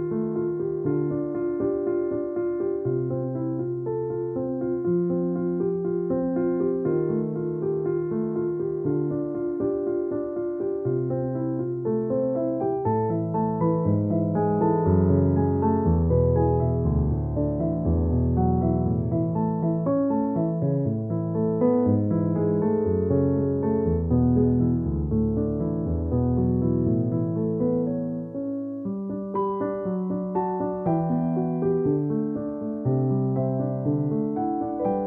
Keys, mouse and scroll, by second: 0.0-0.6 typing, 4.1 space, 4.3 alt+t, 5.0 space, 5.2 click, 5.3 space, 8.7 click, 14.0-16.5 drag, 16.5 space, 16.7 click, 16.8 space, 17.6 ctrl+=, 18.2-20.7 drag, 20.7 space, 20.9 click, 21.1 space, 22.3 click, 22.7 space, 23.7-25.5 typing, 24.4 click, 25.2 click, 30.4 space, 30.6 click, 31.9 j, 33.0-33.3 typing, 34.0 right click, 34.7 click.